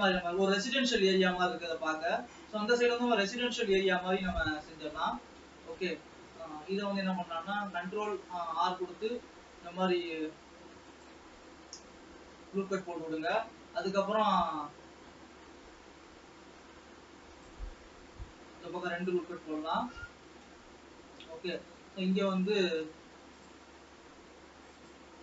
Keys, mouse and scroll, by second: 0.0 ctrl+s, 1.3-4.9 middle drag, 4.9 scroll up 3, 5.0 middle click, 6.0 shift+scroll up 1, 6.1-8.2 shift+middle drag, 8.2 ctrl+r, 12.0 Escape, 12.7-17.6 middle drag, 13.2 scroll down 3, 15.2 ctrl+r, 17.6 ctrl+r, 18.8-19.8 middle drag, 19.8-21.2 scroll up 2, 21.2-21.5 scroll up 1, 21.5-22.9 middle drag, 22.9 ctrl+s.